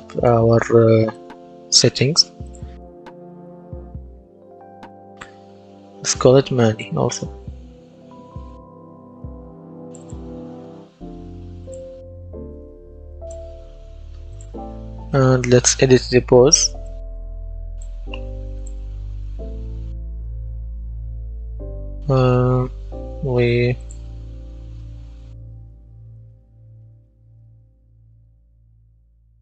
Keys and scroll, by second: 3.5 Right, 4.1 BackSpace, 6.3-8.5 typing, 8.7 Return, 15.0-16.7 typing, 24.8-29.4 typing.